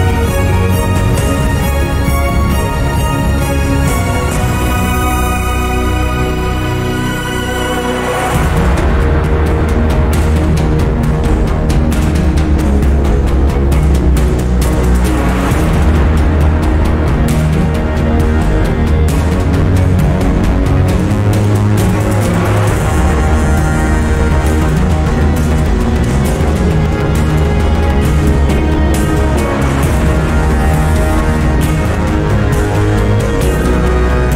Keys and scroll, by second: 9.5 1, 9.6 Return, 9.8 1, 9.9 Return.